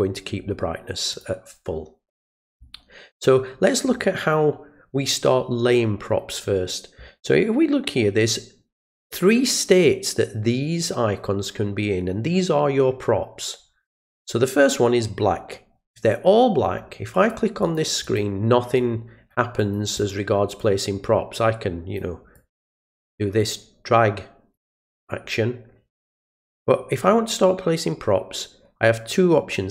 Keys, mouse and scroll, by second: 1.1 click, 17.1 click, 17.6 click, 18.0 click, 18.8 click, 19.6 click, 20.0 click, 20.6-22.0 drag, 22.3-22.9 drag, 23.4-24.5 drag.